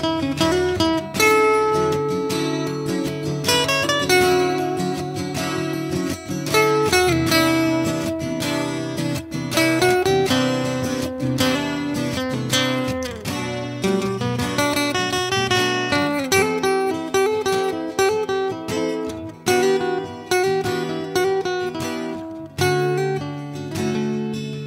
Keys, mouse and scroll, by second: 1.0 a, 2.3 middle click, 3.0 middle drag, 3.2 a, 3.4 Tab, 3.6 a, 3.8 a, 4.1 a, 6.8 Tab, 7.2 n, 9.6 a, 13.0 Tab, 14.4 Tab, 16.8 Tab, 17.4 a, 17.6 a, 19.3 a, 19.6 a, 20.3 a, 21.1 a, 22.1 Tab, 22.9 a, 23.3-24.3 drag, 24.5 click.